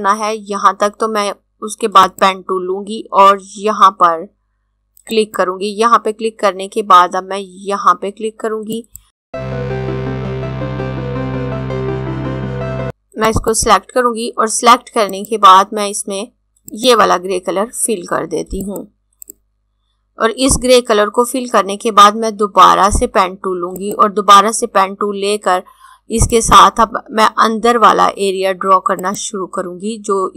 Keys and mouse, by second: 1.7 click, 4.7 click, 8.3 click, 9.4 click, 10.4 click, 11.2 shift+click, 11.5 click, 12.3 click, 12.8 click, 16.8 click, 23.6 click, 26.1 click.